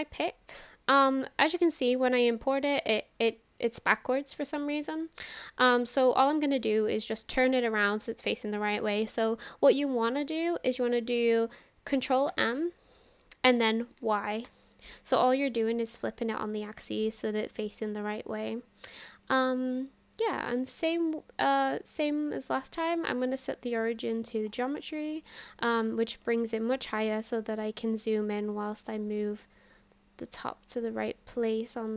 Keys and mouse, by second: 1.3-2.6 middle drag, 2.9-3.6 shift+middle drag, 3.7-5.3 middle drag, 5.7-6.8 middle drag, 7.0 shift+middle click, 7.3 middle click, 12.3 ctrl+m, 14.0 y, 14.5 Return, 15.5-18.2 middle drag, 15.6 typing, 19.2-19.8 middle drag, 21.8-24.1 drag, 25.0-25.3 shift+middle drag, 25.7-26.1 middle drag, 26.3 shift+middle drag, 27.8-31.9 drag.